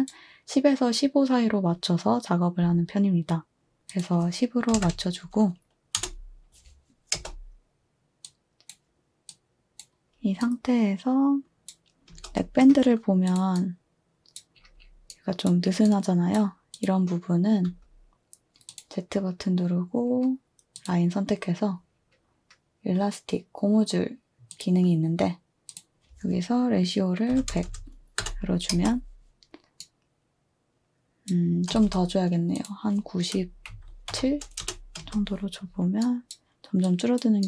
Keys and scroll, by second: 4.7-7.1 typing, 12.1 space, 17.7 z, 27.0-28.7 typing, 28.2 Return, 31.1-35.0 typing.